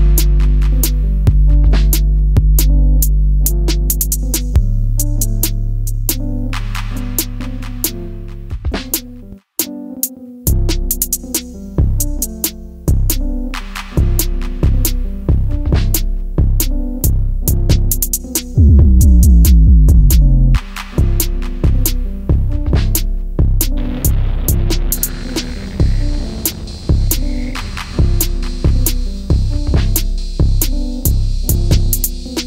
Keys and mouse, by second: 0.5 click, 1.1 Tab, 3.0-4.6 drag, 5.1 click, 6.0-7.7 drag, 8.5 click, 9.3-10.5 drag, 13.1 KP_1, 13.6 KP_3, 15.2-19.2 typing, 16.0 click, 16.6 click, 17.1 click, 17.6 click, 18.3 click, 19.1 click, 21.0 click, 21.8 click, 22.6 middle click, 25.0 KP_1, 25.8 click, 27.2 shift+s, 28.5 shift+d, 28.7 click, 29.3 s, 30.4 drag, 30.9-32.4 drag.